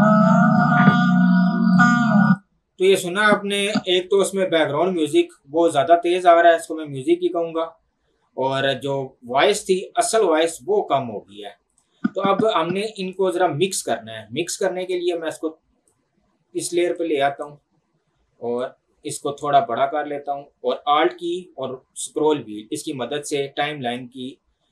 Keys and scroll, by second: 0.2 space.